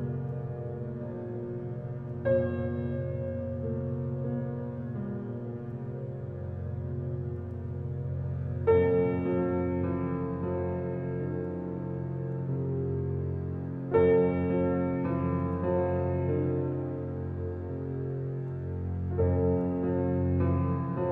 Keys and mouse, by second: 0.3-1.8 drag, 1.8 ctrl+z, 2.9-4.3 ctrl+alt+drag, 7.1-8.1 drag, 10.1 ctrl+z, 11.7-14.0 middle drag, 13.5 ctrl+z, 14.8 f, 16.2-18.8 drag, 19.8-21.0 drag.